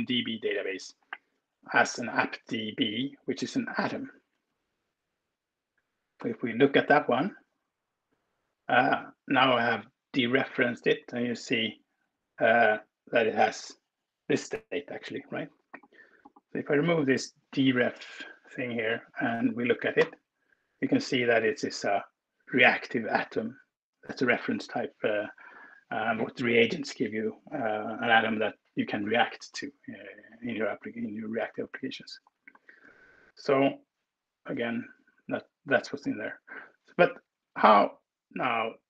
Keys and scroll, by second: 6.2 ctrl+Return, 17.2 Right, 17.8 BackSpace, 19.8 ctrl+Return, 32.6 alt+2, 34.6 alt+Return, 36.0 super+s.